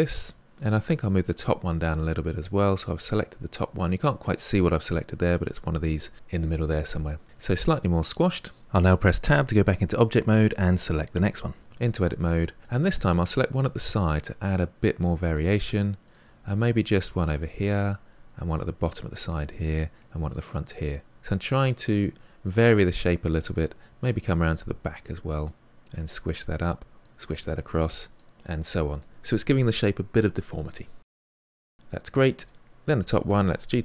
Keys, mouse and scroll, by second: 0.4 click, 1.2 g, 7.3 Tab, 9.9 click, 11.6 Tab, 12.6 click, 13.4 g, 16.0 click, 16.2 g, 17.7 click, 17.9 g, 19.2 click, 19.4 g, 21.2 click, 21.3 g, 22.4-23.7 middle drag, 23.7 click, 23.9 g, 24.6 middle click, 25.2 click, 25.3 g, 25.8 middle click, 26.6 click, 26.7 g, 27.2-29.3 middle drag, 30.1 Tab, 30.7-32.3 middle drag, 32.3 click, 33.0 g.